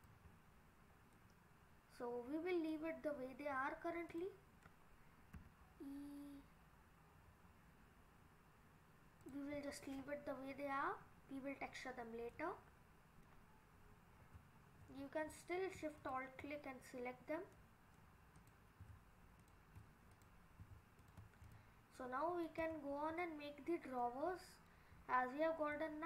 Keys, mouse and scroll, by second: 0.3-1.3 scroll up 6, 1.1 middle click, 3.1 scroll down 3, 3.5-3.9 scroll up 3, 4.1 click, 5.4 e, 9.8-11.4 scroll down 5, 11.4-12.3 scroll down 8, 12.3 middle click, 16.0 alt+shift+click, 17.4 scroll down 1, 17.6 middle click, 18.4 click, 19.0 alt+shift+click, 19.4 click, 19.9 click, 20.1 click, 21.0 alt+shift+click, 21.4 click, 22.0 middle click, 22.7 Tab, 23.0 scroll up 3, 23.2 middle click, 24.1 middle click, 25.0-25.5 scroll up 3, 25.8 middle click.